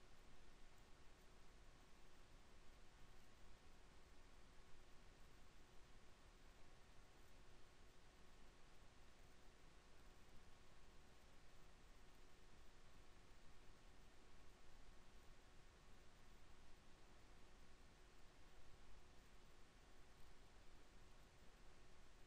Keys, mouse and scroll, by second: 0.1 click, 0.2 e, 8.6 x, 11.4 KP_1, 13.3 z, 14.3 b, 16.4 b.